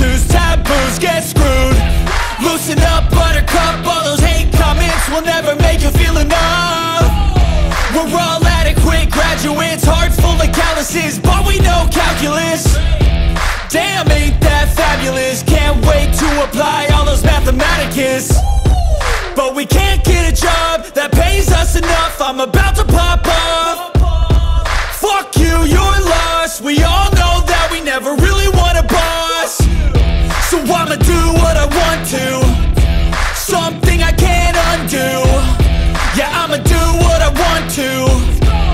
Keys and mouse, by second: 2.7 s, 5.1 click, 6.9 r, 9.3 click, 10.6 g, 12.7 click, 14.8 click, 16.5 click, 17.7-18.8 drag, 19.4 click, 24.4 r, 27.8 click, 29.6 click, 32.1 s, 34.1 click, 35.3 g, 37.8 click.